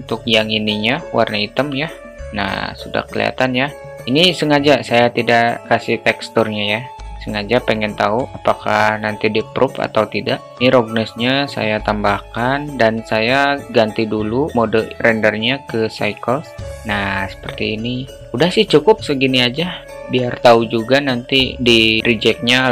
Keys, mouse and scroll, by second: 2.2 Tab, 11.2-13.2 drag, 15.2-16.7 drag.